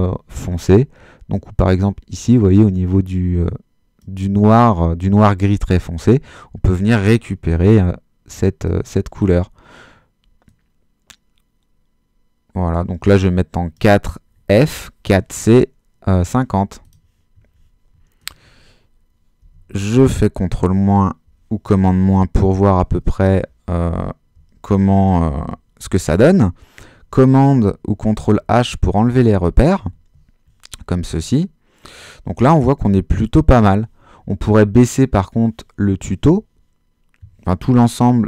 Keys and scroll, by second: 19.5 super+-, 25.8 super+h, 27.9 super+h.